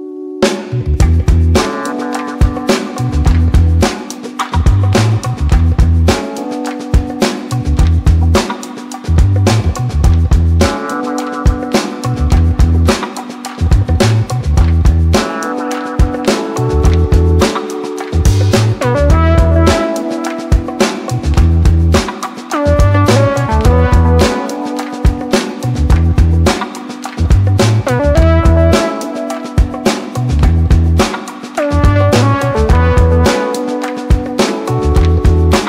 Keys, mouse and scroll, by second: 10.7 click, 17.5 click, 26.3 click.